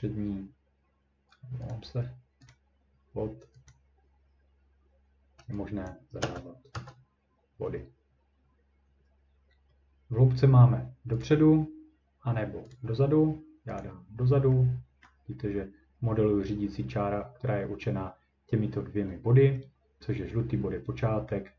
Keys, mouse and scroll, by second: 1.3 scroll, 1.7 click, 2.5 click, 3.7 click, 5.9 click, 6.2 0, 6.7 Return, 11.2 click, 12.7 click, 13.8 click, 15.0-15.3 ctrl+scroll.